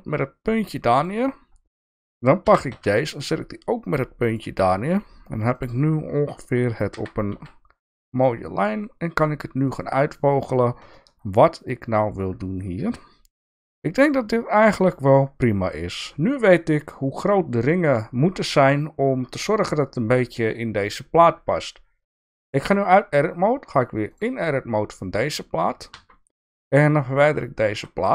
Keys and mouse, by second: 1.0 click, 2.4 g, 6.9 g, 10.9-12.2 shift+middle drag, 14.7 click, 21.4 Tab, 24.1 click, 25.9 Tab, 27.0 click, 27.7 x.